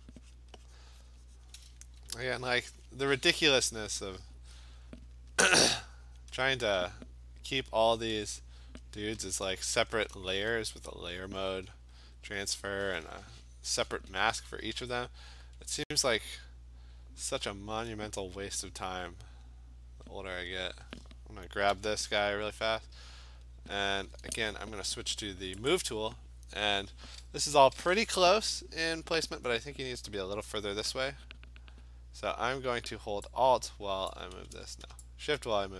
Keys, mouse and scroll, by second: 0.4 click, 0.8 click, 1.0 alt+click, 1.2 click, 1.5 click, 2.4 alt+click, 4.3 alt+click, 5.2 click, 5.7 click, 6.2 click, 6.5 click, 7.8 click, 8.6 click, 8.7 click, 9.1 click, 9.5 click, 9.9 Return, 10.8 click, 11.1 click, 11.3 click, 11.6 click, 11.9 click, 12.1 click, 12.5 click, 12.7 click, 13.0 click, 14.4-15.3 typing, 21.7 m, 23.4 click, 25.7 click, 32.8 click, 34.1 alt+click, 34.5 ctrl+z.